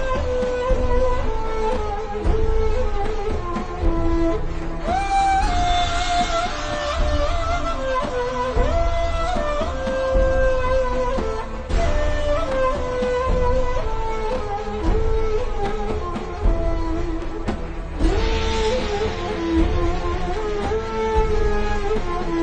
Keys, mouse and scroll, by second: 0.3-0.7 scroll up 1, 1.3 click, 1.6-2.1 alt+shift+scroll up 2, 3.1 click, 4.2 a, 4.5-4.8 scroll up 1, 5.7 click, 6.5 click, 6.7 v, 6.8-8.4 scroll down 1, 8.4 n, 9.4 click, 10.7 v, 11.6-12.1 alt+shift+scroll up 3, 12.4 a, 12.8 click, 17.8 v, 18.0 click.